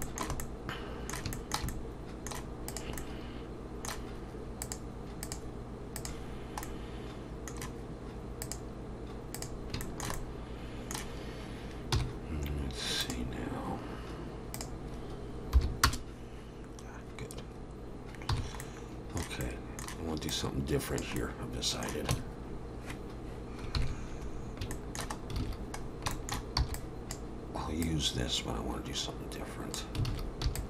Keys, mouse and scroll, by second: 0.0 shift+middle click, 0.4 middle click, 1.3 shift+middle click, 1.7 middle click, 2.7 click, 3.0 middle click, 4.6 click, 6.6 middle click, 8.4 click, 9.8 shift+middle click, 10.1 middle click, 11.9 n, 13.0 click, 14.5 click, 18.3 n, 18.6 middle click, 20.3 click, 21.2 middle click, 22.1 Tab, 23.7 ctrl+KP_3, 24.4-25.4 scroll up 6, 24.7 shift+middle click, 25.4 alt+a, 25.8-26.1 scroll down 3, 26.1 shift+middle click, 26.6 b, 27.8 click, 30.1 alt+a, 30.4 b.